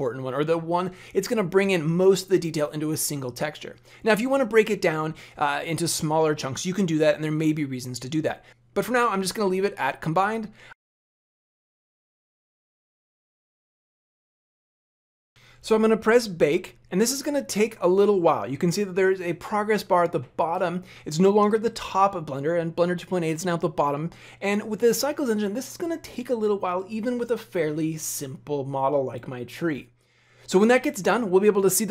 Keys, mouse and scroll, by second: 10.2 click, 15.3 click.